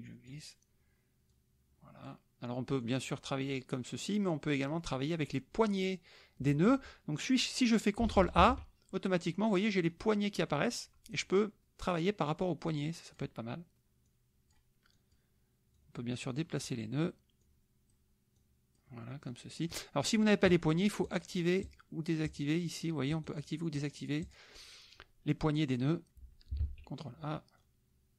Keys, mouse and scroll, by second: 1.3 click, 2.9 click, 4.3 click, 8.4 ctrl+a, 9.8-11.3 drag, 11.6 click, 12.6 click, 14.1 click, 14.9 click, 15.8-16.9 drag, 17.4 click, 18.3 click, 19.3 click, 21.0 click, 21.6 click, 22.2 click, 23.2 click, 23.7 click, 24.2 click, 26.6 ctrl+a, 27.6 click.